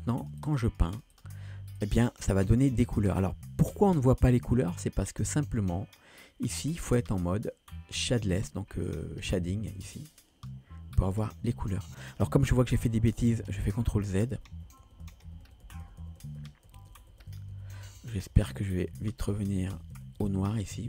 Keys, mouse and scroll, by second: 0.2 click, 0.5 click, 0.7 click, 1.0 click, 1.2 click, 1.8 click, 2.1 click, 2.5 click, 2.7 click, 2.9 click, 3.1 click, 10.2 click, 13.0 ctrl+z, 13.3 ctrl+z, 13.5 ctrl+z, 13.7 ctrl+z, 14.0 ctrl+z, 14.2 ctrl+z, 14.4 ctrl+z, 14.9 ctrl+z, 15.1 ctrl+z, 15.3 ctrl+z, 15.5 ctrl+z, 15.7 ctrl+z, 15.9 ctrl+z, 16.1 ctrl+z, 16.3 ctrl+z, 16.5 ctrl+z, 16.7 ctrl+z, 17.0 ctrl+z, 17.2 ctrl+z, 17.4 ctrl+z, 17.6 ctrl+z, 17.8 ctrl+z, 18.1 ctrl+z, 18.3 ctrl+z, 18.5 ctrl+z, 19.0 ctrl+z, 19.3 ctrl+z, 19.6 ctrl+z, 19.8 ctrl+z, 20.0 ctrl+z, 20.3 ctrl+z, 20.6 ctrl+z, 20.8 ctrl+z.